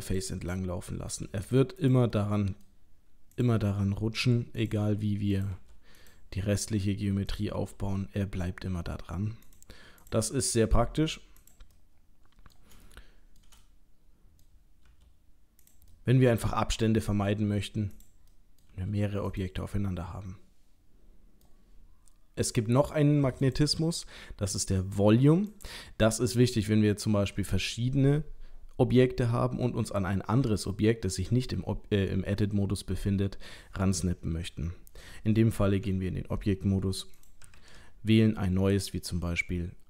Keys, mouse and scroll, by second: 0.5 middle click, 1.1 g, 2.2 middle click, 3.4 click, 4.2 g, 5.3 click, 5.5 g, 7.3 click, 7.5 g, 10.0 click, 10.3 middle click, 10.8 g, 11.8 middle click, 12.9 shift+middle click, 13.5 middle click, 14.4 middle click, 14.9 g, 15.9 middle click, 16.6 middle click, 17.4 g, 18.3 middle click, 18.5 middle click, 18.7 g, 19.7 middle click, 23.4 click, 34.4 scroll down 1, 35.4-35.8 scroll down 3, 35.8 Tab, 37.2 click, 37.6 shift+a.